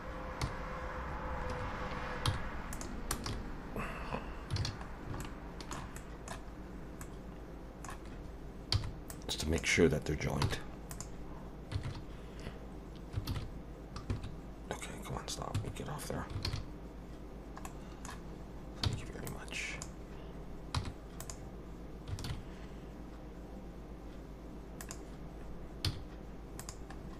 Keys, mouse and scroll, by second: 0.4 ,, 2.3 m, 3.3 a, 4.6 alt+a, 4.9 scroll down 2, 5.2 shift+middle click, 6.0 middle click, 6.6 scroll up 2, 7.0 middle click, 8.7 b, 10.4 m, 14.1 Escape, 15.5 Escape, 16.5 alt+a, 17.6 middle click, 18.8 b, 20.7 m, 22.3 alt+a, 24.8 click, 25.9 z, 27.0 scroll down 2.